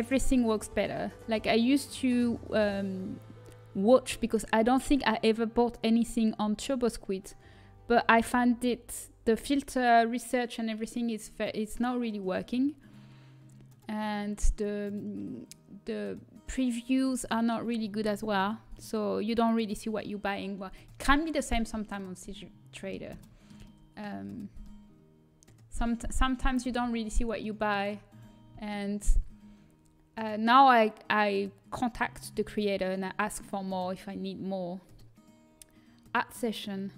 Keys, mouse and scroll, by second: 22.0 middle click, 26.5 a, 27.4-29.8 middle drag.